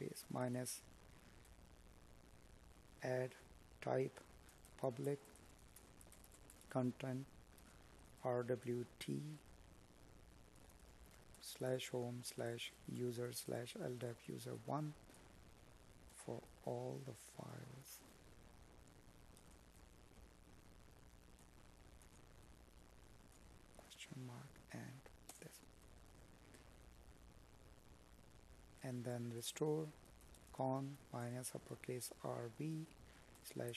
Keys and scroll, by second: 5.2 space, 25.0 space, 27.2 space.